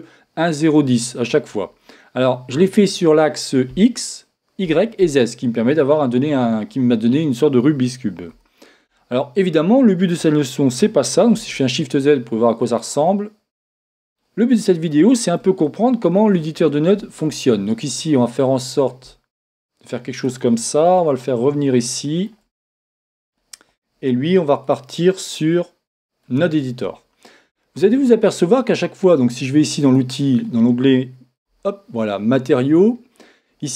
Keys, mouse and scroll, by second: 0.3-2.2 scroll up 1, 2.2-3.0 scroll up 1, 3.0-4.2 scroll up 1, 4.2-5.9 scroll up 1, 5.9-8.3 scroll up 1, 8.3 n, 11.0 n, 11.5 shift+z, 14.2-18.4 middle drag, 17.9-18.4 scroll up 1, 18.6-20.3 drag, 24.0 middle click, 24.6-26.5 drag, 29.8-31.6 drag, 31.5 n.